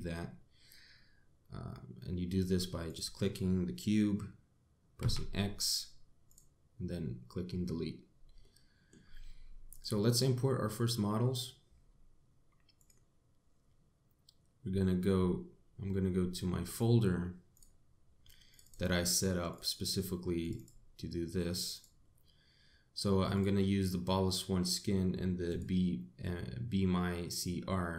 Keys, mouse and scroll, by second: 2.7 click, 4.8 x, 8.3 middle click, 9.5 click.